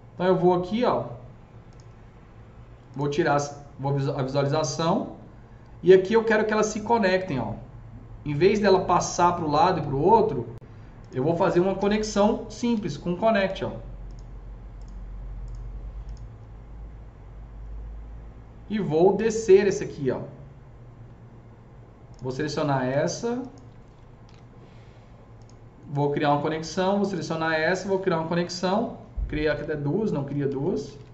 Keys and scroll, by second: 11.7 alt+c, 12.6 s, 24.1 ctrl+shift+e, 27.8 ctrl+shift+e, 29.3 ctrl+z, 30.0 ctrl+z, 30.3 ctrl+z, 30.7 ctrl+z.